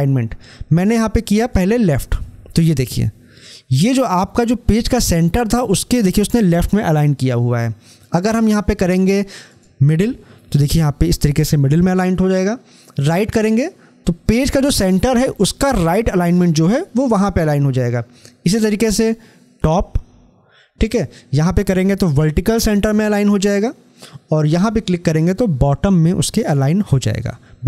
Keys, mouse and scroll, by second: 1.3 click, 9.4 click, 13.0 click, 18.6 click, 23.0 click, 26.1 click.